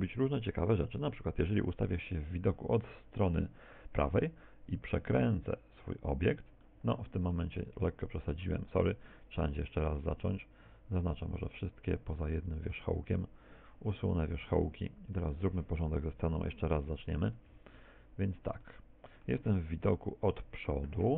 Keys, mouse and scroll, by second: 0.2 KP_1, 1.0 KP_3, 2.5-3.0 scroll up 4, 4.2 r, 6.3 ctrl+click, 6.6 middle click, 8.3 a, 9.7 shift+middle click, 10.2-10.7 scroll down 1, 10.7 a, 11.4 middle click, 12.2 middle click, 12.9 shift+right click, 13.8 x, 15.1 right click, 16.0 KP_7, 17.6 shift+c, 18.7 shift+middle click, 19.9 KP_1.